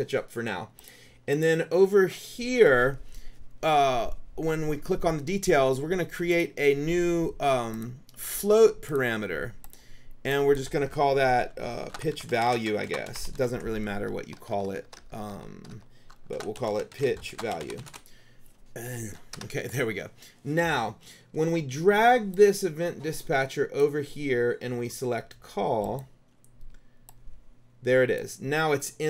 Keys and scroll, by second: 11.8-14.4 typing, 16.2-19.5 typing.